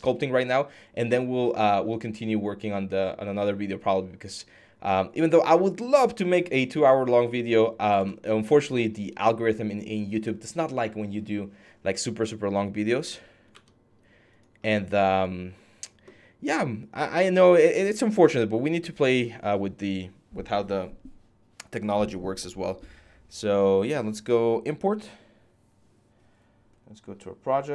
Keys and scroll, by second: 7.7 alt+Tab, 13.3 alt+Tab, 14.2 alt+Tab.